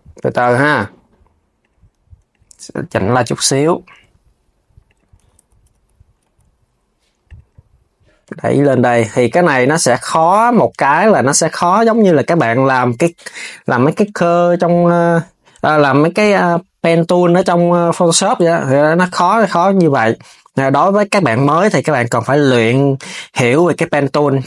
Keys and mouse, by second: 2.0 click, 2.5 g, 3.7 g, 4.9 z, 5.9 z, 6.9 click, 14.0 click, 17.6 click, 17.9 Tab, 18.2 click, 18.7 Tab, 20.9 click, 21.4 KP_3, 21.9 g.